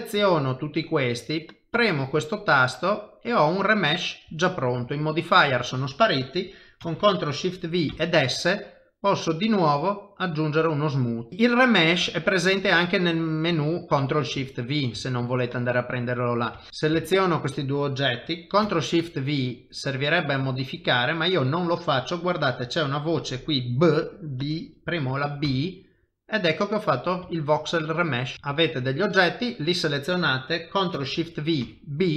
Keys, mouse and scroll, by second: 1.7 click, 2.8 middle click, 4.3 shift+middle click, 6.8 ctrl+shift+v, 10.0 middle click, 11.3 shift+middle click, 11.4 middle click, 12.1 shift+middle click, 12.6 middle click, 13.6 shift+middle click, 13.9 middle click, 13.9 shift+middle click, 14.4 ctrl+middle click, 15.0 shift+middle click, 15.8 middle click, 16.6 shift+middle click, 16.7 click, 16.7 g, 17.0 shift+click, 18.6 ctrl+shift+v, 26.3 middle click, 27.3 shift+middle click, 27.7 middle click, 28.3 shift+d, 28.5 shift+click, 29.5 middle click, 30.9 ctrl+shift+v.